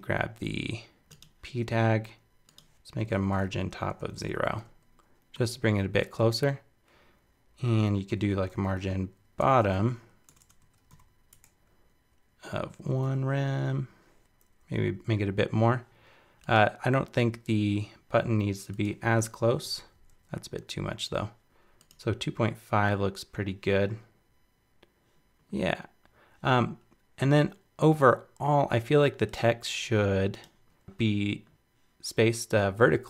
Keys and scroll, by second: 19.5 alt+Down.